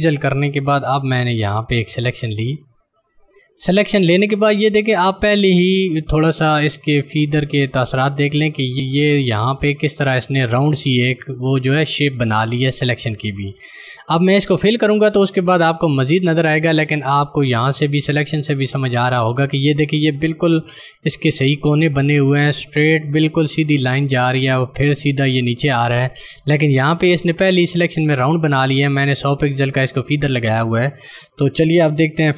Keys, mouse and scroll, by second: 1.0 click.